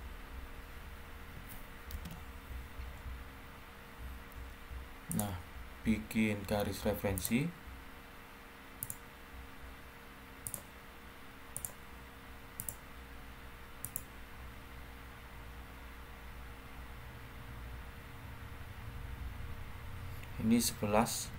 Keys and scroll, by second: 1.8 ctrl+8, 21.1 typing.